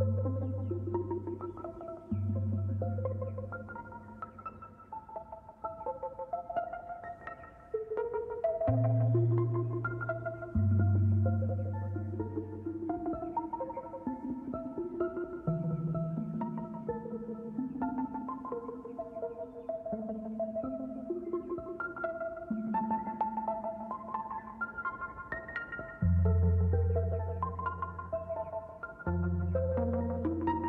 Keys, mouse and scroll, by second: 3.4 click, 4.1 r, 10.2 shift+click, 10.4 shift+click, 11.0 shift+click, 12.6 click, 13.2 shift+click, 13.7 shift+Left, 13.9 shift+Left, 14.7 scroll up 1, 15.3 scroll up 1, 15.9 e, 16.3 r, 18.9-19.2 scroll down 2, 19.3-21.5 middle drag, 27.3-29.6 shift+middle drag, 29.6-30.6 drag.